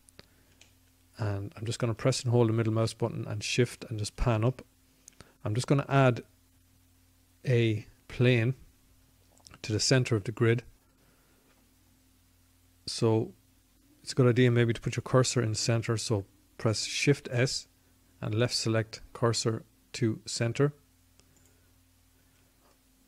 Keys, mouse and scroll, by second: 15.7 shift+s.